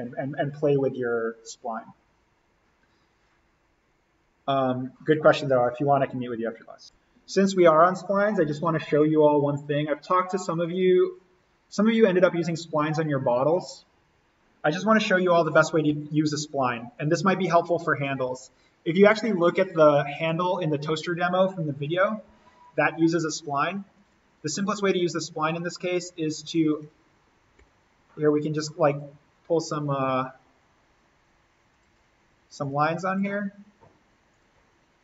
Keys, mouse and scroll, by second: 8.5-10.6 drag, 15.8 alt+n, 16.4-16.9 scroll up 1, 16.9 click, 17.4-17.8 scroll up 1, 17.8-20.1 drag, 22.2 l, 23.9 click, 26.4 Escape, 27.6 l, 28.8 click, 31.6 click, 32.4 Escape, 33.0 click.